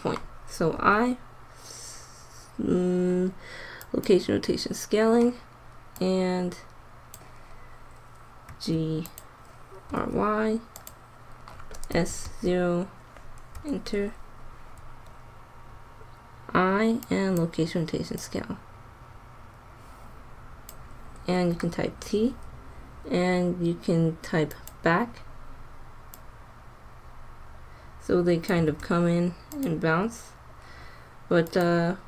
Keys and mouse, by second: 0.7 i, 6.1-7.2 drag, 8.5 g, 9.8 r, 11.8 s, 14.7 i, 18.2-20.1 drag, 21.4 t, 26.2-27.9 drag, 28.7 alt+a, 29.6-30.6 drag.